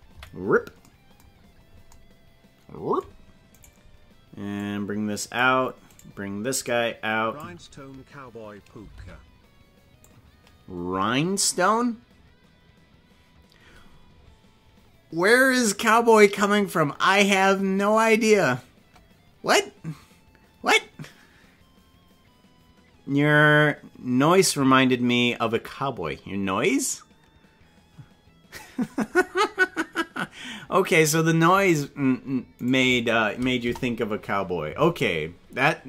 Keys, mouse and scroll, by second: 0.1 KP_Decimal, 2.2 scroll down 10, 3.6 right click, 4.6 click, 6.0 right click, 6.6 click, 8.9 alt+r, 10.0-11.3 drag, 32.6 right click, 33.6 KP_0.